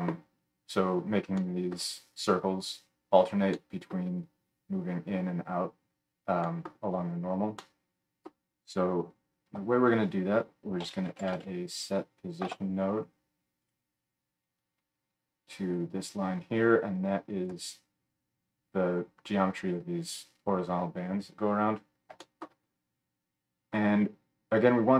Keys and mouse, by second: 9.5 F3, 14.6-24.9 drag.